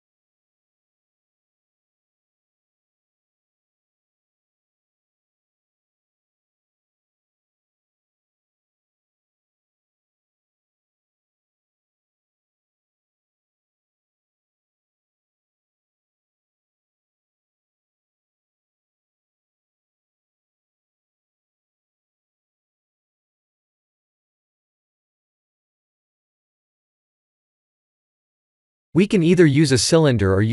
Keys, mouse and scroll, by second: 0.1 shift+middle click, 0.9 middle click, 2.9 click, 4.2 shift+click, 5.1 shift+click, 6.2 shift+click, 6.8 x, 10.6 2, 11.1 alt+click, 11.5 f, 12.1 click, 12.3 Tab, 12.9-13.3 scroll down 3, 13.3 middle click, 15.5-16.0 scroll down 2, 16.0 click, 16.7 middle click, 17.5 KP_3, 18.0 KP_1, 19.6 Tab, 22.4 shift+z, 23.9 1, 24.4 b, 26.3 r, 27.7 Tab, 28.0 click, 28.5 middle click, 29.4 shift+z, 29.7 middle click.